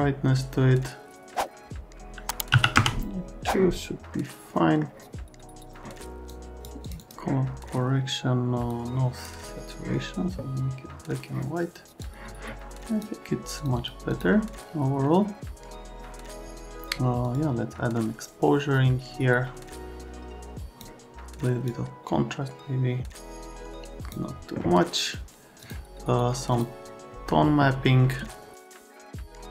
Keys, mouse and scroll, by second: 2.6 KP_3, 2.7 KP_Enter, 4.1 middle click, 6.3 click, 6.8 click, 7.0 click, 8.7 click, 12.0 click, 13.6 click, 13.7 click, 14.1 click, 17.2 click, 19.9 click, 21.8 click, 25.6 click, 26.5 click, 28.7 click.